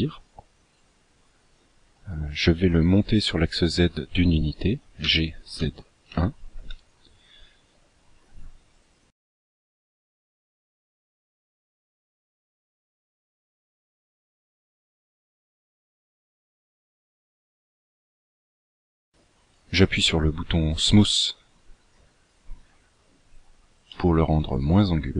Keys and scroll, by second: 5.1 g.